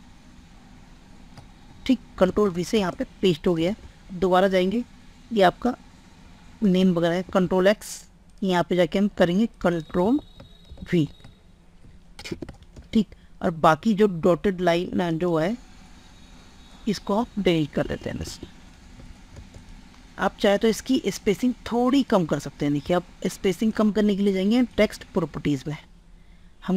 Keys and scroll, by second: 2.3 ctrl+space, 3.7 alt+Tab, 6.8 ctrl+x, 10.0 ctrl+a, 10.6 ctrl+v, 12.4 ctrl+space, 19.4 ctrl+space.